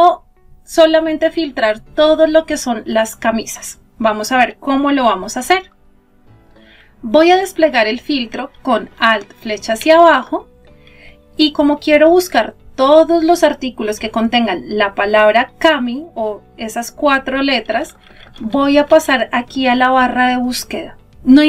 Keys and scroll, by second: 7.2 alt+Down, 16.7 Up.